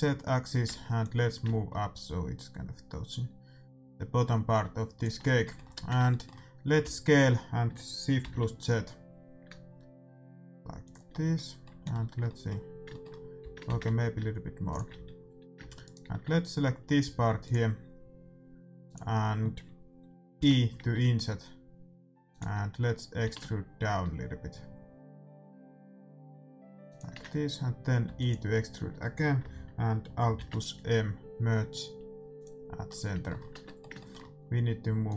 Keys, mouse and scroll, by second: 0.6 Tab, 1.0-2.8 drag, 5.4-8.2 middle drag, 5.7 Tab, 6.8 s, 11.1-13.6 middle drag, 13.4 s, 14.9 a, 15.8-18.1 right drag, 17.4-20.7 drag, 20.3 i, 23.2 e, 28.0 e, 30.3 alt+m, 32.8-35.0 middle drag, 33.5 Tab, 35.0-35.1 drag.